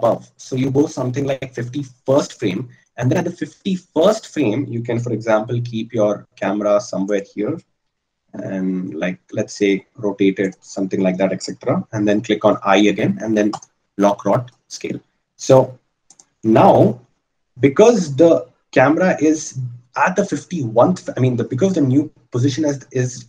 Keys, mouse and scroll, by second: 5.4 g, 8.2 r, 17.1-23.2 drag.